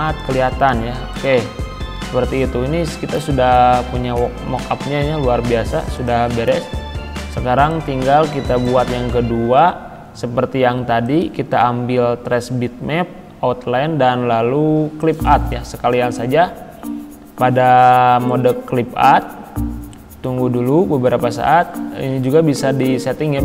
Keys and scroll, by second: 0.7 c.